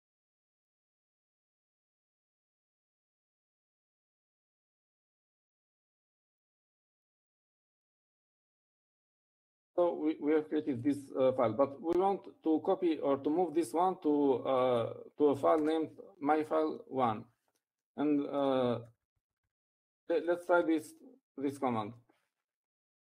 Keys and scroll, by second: 2.0-4.9 typing, 9.0-9.7 typing, 17.2 1, 20.0-21.2 typing.